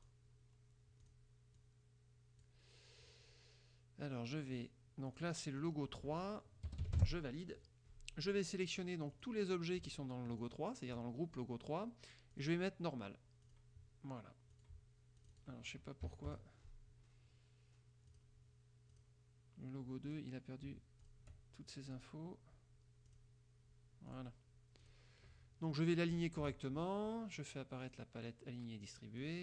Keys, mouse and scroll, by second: 0.1 click, 1.2 click, 1.7 click, 5.3 click, 5.7 click, 6.8 BackSpace, 6.9 KP_3, 7.1 KP_Enter, 9.3 click, 10.5 shift+click, 12.5 click, 13.6 click, 14.7 click, 15.3 click, 16.2 KP_Subtract, 16.4 KP_Add, 18.2 click, 19.1 click, 20.2 click, 21.1 shift+click, 22.0 click, 23.2 click, 24.2 click, 24.9 click, 26.3 shift+click, 27.9 click, 29.3 click.